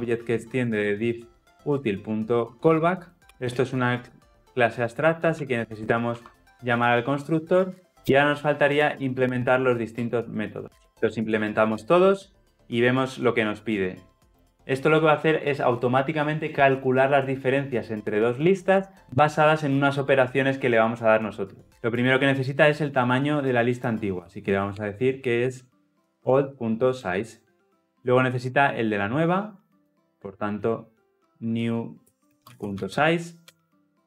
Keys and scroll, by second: 5.4 ctrl+p, 6.1 Escape, 7.5 ctrl+alt+l, 7.7 ctrl+alt+o, 9.2 alt+Return, 10.9 shift+Down, 27.0 Return.